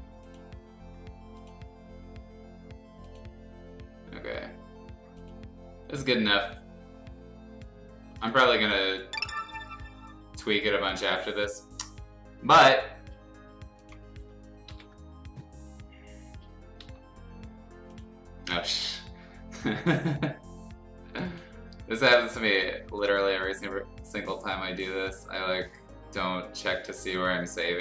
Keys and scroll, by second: 0.0 [, 14.7 ctrl+o, 16.8 Escape.